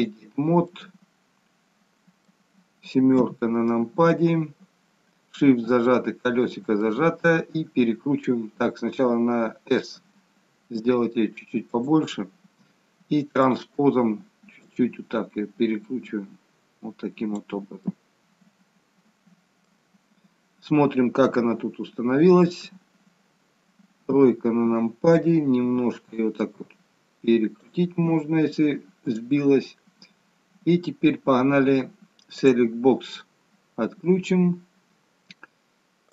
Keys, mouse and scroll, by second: 0.6 middle click, 3.2 KP_7, 5.6 shift+middle click, 13.3 click, 14.6 click, 17.9 middle click, 20.6 scroll down 1, 21.3 shift+middle click, 23.9 KP_3, 26.4 click, 29.0 click, 32.4 click, 34.4-35.4 scroll up 2, 36.0 click.